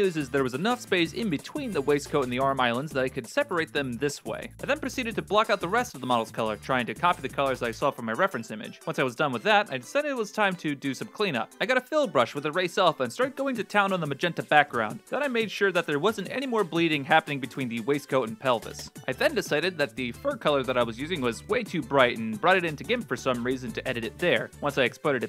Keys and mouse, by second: 0.6 Tab, 1.1 Tab, 1.6 right click, 2.6 ctrl+space, 4.6 shift+middle click, 4.6-8.5 typing, 4.9 middle click, 5.0 click, 5.6 click, 5.9 ctrl+z, 6.1 ctrl+space, 6.3 right click, 6.4 alt+middle click, 6.8 middle click, 7.1 right click, 7.3 middle click, 7.4 middle click, 8.4 middle click, 9.6 shift+middle click, 10.1 shift+middle click, 11.1 shift+middle click, 11.5 alt+s, 11.9 click, 13.0 click, 13.5 click, 13.6 middle click, 14.3 middle click, 15.0 click, 15.3 click, 15.6 ctrl+z, 15.9 ctrl+z, 15.9 click, 16.4 f, 16.6 click, 17.1 x, 17.3 s, 17.5 click, 18.0 click, 18.5 x, 18.6 click.